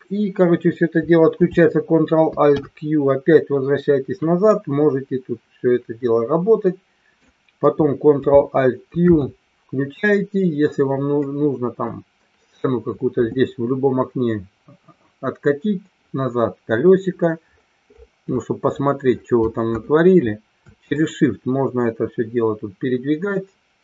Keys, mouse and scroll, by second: 2.5 ctrl+alt+q, 4.5-7.1 middle drag, 9.3 ctrl+alt+q, 11.3-11.9 middle drag, 21.1-23.8 shift+middle drag.